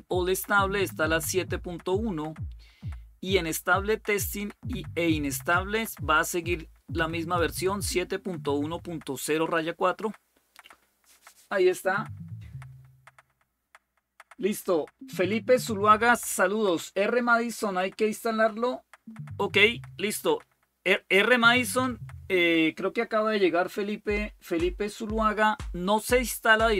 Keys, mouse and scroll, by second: 0.7-2.1 drag, 5.6-7.2 drag.